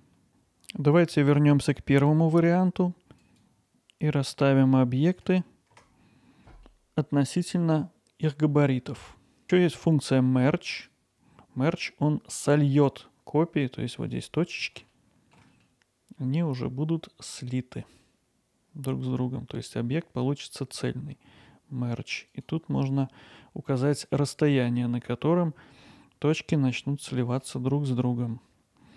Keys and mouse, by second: 0.0 middle click, 2.4-6.8 drag, 6.8-7.2 middle drag, 9.2 alt+middle click, 10.7-14.6 drag, 15.1 ctrl+alt+middle click, 15.5 middle click, 22.3-27.1 drag, 27.1-27.4 middle drag, 28.2-28.9 alt+middle drag.